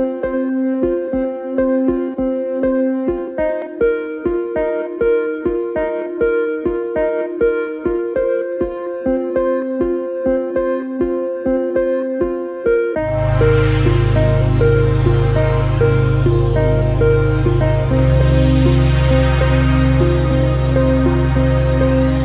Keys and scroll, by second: 4.0 ctrl+alt+space, 4.9 ctrl+c, 5.1 ctrl+alt+space, 5.3 ctrl+v, 5.4 ctrl+alt+space, 6.3 ctrl+space, 11.4 ctrl+Return, 12.1 ctrl+s, 12.7 ctrl+a, 15.4 ctrl+shift++, 20.0 ctrl+alt+space.